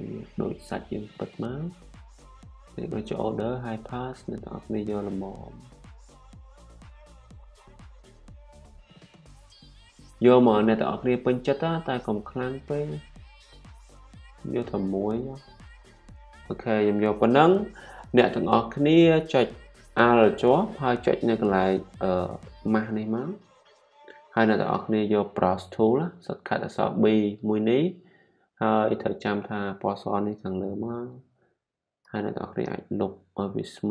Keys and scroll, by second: 26.6 u, 30.2-31.1 typing, 32.4-33.0 typing.